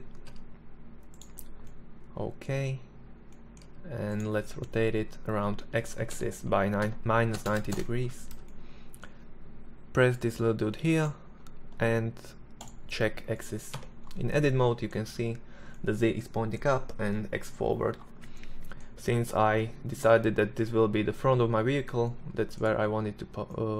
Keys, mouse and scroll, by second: 2.9 s, 4.1 r, 7.8-13.0 middle drag, 13.0 Tab, 16.5-17.8 middle drag, 23.5 Tab.